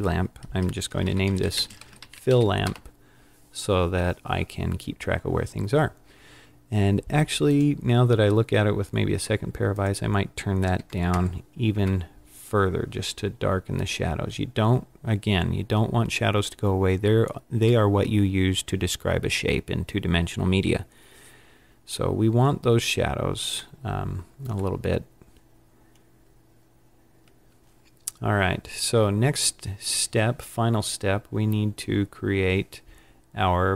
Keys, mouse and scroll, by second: 1.3 l, 2.6 l, 7.4 click, 9.6 click, 11.0 KP_0, 23.7 middle click, 25.1 scroll down 4, 25.9-26.6 scroll up 6, 30.9-31.4 scroll down 3.